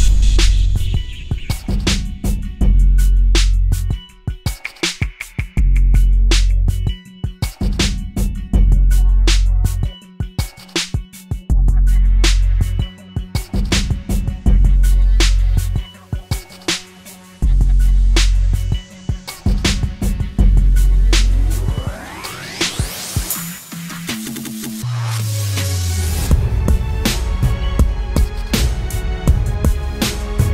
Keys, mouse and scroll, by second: 3.2 right click, 5.1 ], 7.2 double click, 10.4 double click, 15.9-18.2 scroll up 1, 20.7 typing, 23.4-24.5 typing.